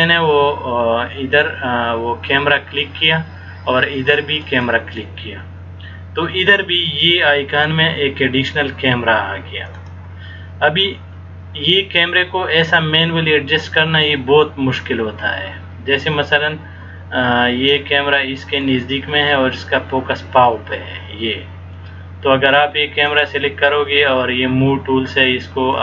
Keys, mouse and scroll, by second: 4.6 click, 9.9 click, 12.9 middle click, 19.2 scroll down 2, 19.6-20.4 scroll up 8, 21.9 middle click, 23.2 click.